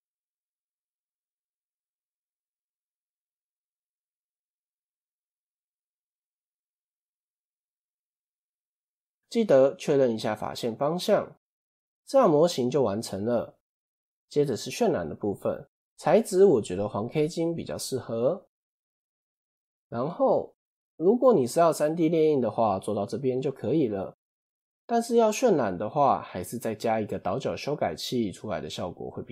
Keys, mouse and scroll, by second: 0.0-1.1 middle drag, 1.1 ctrl+b, 5.8 click, 6.5 KP_1, 7.9 a, 8.3 middle click, 8.7-9.3 scroll down 1, 9.3 shift+n, 10.6 Tab, 11.2 KP_7, 11.9-12.5 scroll down 1, 12.5 scroll down 2, 14.1-15.0 scroll up 1, 15.0-15.5 scroll up 1, 15.5 click, 16.2-19.3 drag, 20.7-21.4 middle drag, 21.4 scroll up 1, 22.2 scroll up 1, 22.2-24.8 middle drag, 24.8 KP_7, 25.6 scroll down 3, 27.2 click.